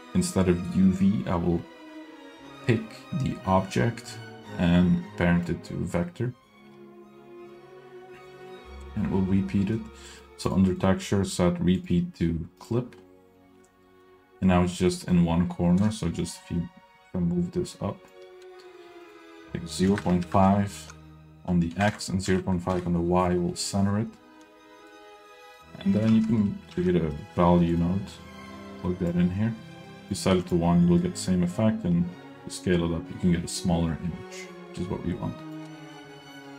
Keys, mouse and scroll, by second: 2.6-5.8 drag, 6.9-7.5 middle drag, 8.5 middle click, 9.6 middle click, 9.9 scroll down 1, 10.1 middle drag, 10.8 click, 11.8-13.0 drag, 13.5 scroll down 1, 13.7 middle click, 14.9 middle click, 15.2-15.8 scroll up 1, 15.8-18.3 shift+drag, 19.0-22.9 drag, 24.8 middle click, 25.6 click, 26.1 shift+a, 28.4-29.3 drag, 30.1 click, 31.8-35.8 drag.